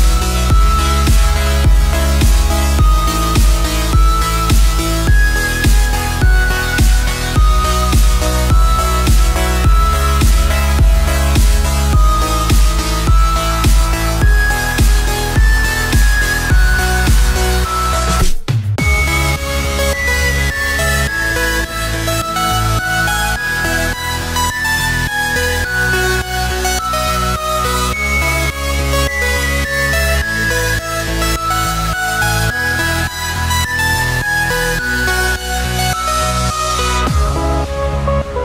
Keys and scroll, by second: 23.9 ctrl+a, 30.8 ctrl+a.